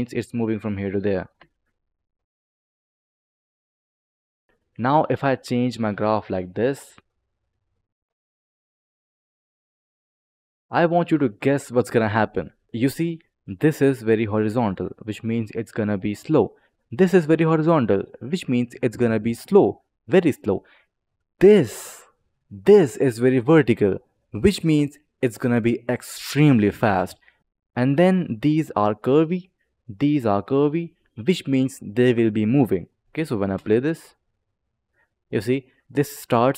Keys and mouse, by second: 0.3 click, 1.3 space, 4.4 click, 5.1 click, 7.5 click, 9.7 click, 12.3 click, 20.3 click, 21.3 click, 27.4 ctrl+z, 27.8 click, 29.1 click, 32.4 click, 33.5 space, 35.1 click.